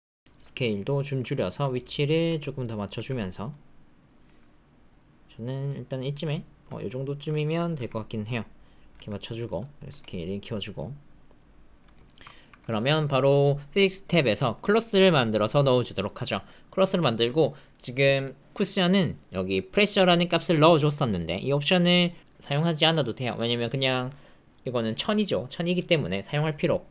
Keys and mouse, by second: 0.4 click, 1.2 alt+middle click, 2.2 s, 2.9 g, 3.5 click, 4.2 g, 6.2-7.2 drag, 7.7 g, 8.9 g, 9.6 click, 9.8 s, 10.5-11.9 drag, 12.0 shift+click, 12.3 ctrl+click, 15.1 click, 16.3 click, 17.2 click, 17.7 click, 19.0 middle click, 19.7 middle click.